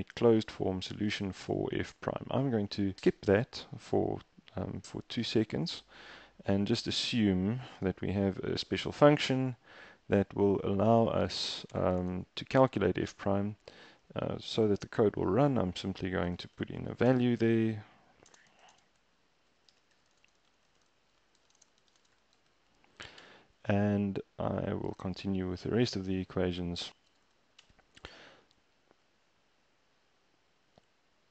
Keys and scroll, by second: 5.1 super+Tab, 7.7 Return, 8.6 f, 14.0 typing, 16.2-23.0 typing, 23.1 Return, 26.8 super+v, 27.1 BackSpace, 27.6 shift+Return.